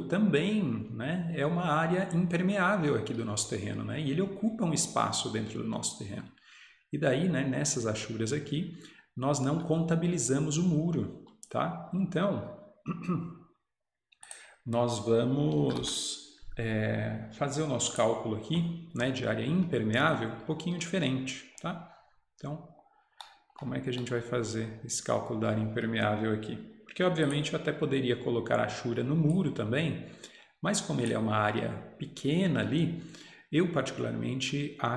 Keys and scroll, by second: 15.4-16.4 typing.